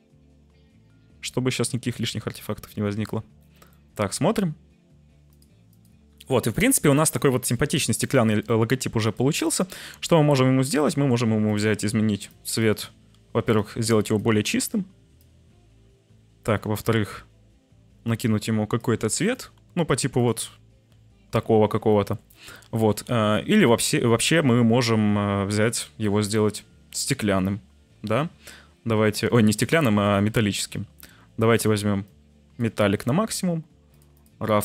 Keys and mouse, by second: 0.2 shift+middle click, 0.6-3.1 shift+drag, 3.6-4.0 shift+middle drag, 5.3 click, 5.7 click, 19.3 click, 21.8 click, 30.2 click, 32.0 click, 33.9-34.6 drag.